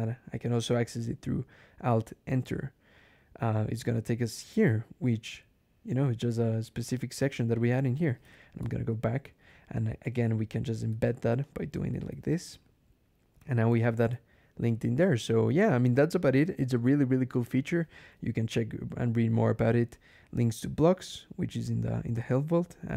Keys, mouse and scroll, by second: 2.2 alt+Return, 3.5-4.2 scroll up 4, 7.4 click, 8.4 ctrl+alt+Left, 9.1 click, 9.9 click, 10.2 Left, 10.8 shift+1, 11.3 shift+click, 11.8 ctrl+shift+e, 13.8 ctrl+e, 15.2 click, 18.2 2.